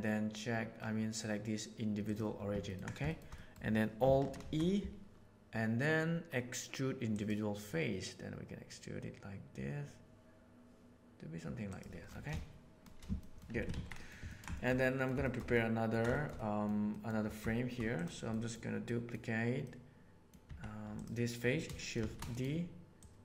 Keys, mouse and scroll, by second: 3.0 shift+middle click, 3.3 middle click, 4.3 alt+e, 12.2 shift+middle click, 13.1 middle click, 13.5 Tab, 13.7 alt+a, 13.8 middle drag, 14.2 ctrl+middle click, 14.5 shift+middle click, 14.7 middle click, 15.2 shift+middle click, 15.5-15.9 ctrl+middle drag, 16.1 shift+middle click, 16.3 middle click, 16.9 middle click, 18.3 middle click, 18.8 middle drag, 19.6-20.3 middle drag, 20.4 Tab, 20.9 click, 21.9 shift+d, 23.0 click.